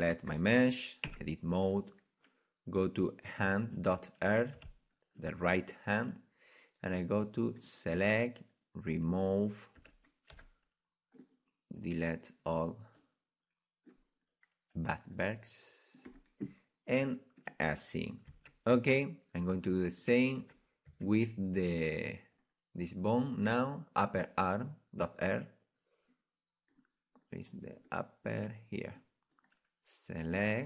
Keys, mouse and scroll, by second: 0.3 right click, 1.1 Tab, 4.5 click, 4.5 a, 4.7 click, 5.0-7.6 drag, 9.8 z, 10.1-11.2 drag, 11.2 c, 17.5 click, 18.3 Tab, 18.5-18.9 drag, 19.5 Tab, 19.9-21.7 right drag, 20.4 Tab, 20.9 Tab, 21.7-28.9 middle drag, 28.9-30.6 drag, 29.3 middle click, 29.7 middle click.